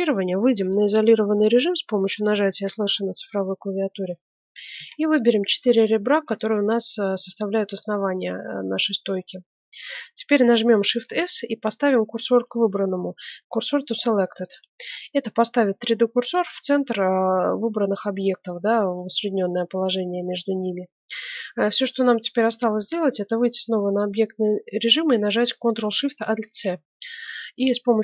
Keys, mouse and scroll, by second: 2.7 KP_Divide, 3.7-5.5 middle drag, 4.7 ctrl+Tab, 5.7-8.6 right drag, 8.6-11.3 middle drag, 10.2 scroll up 1, 10.9 shift+s, 22.8 Tab, 26.4 ctrl+alt+shift+c.